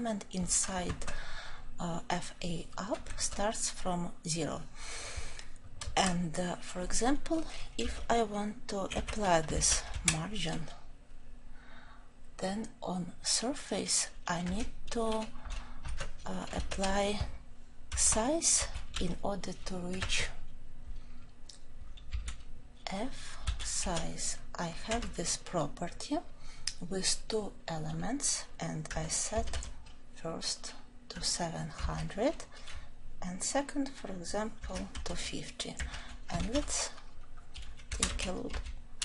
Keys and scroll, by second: 16.7 ctrl+;, 25.0 Return, 28.8 Return.